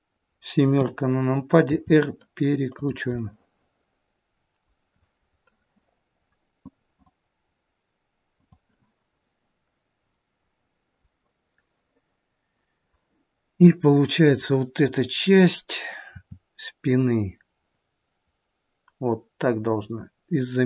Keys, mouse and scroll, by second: 0.6 KP_7, 1.7 r, 3.1 middle click, 10.9 middle click, 16.0 click, 16.0 r.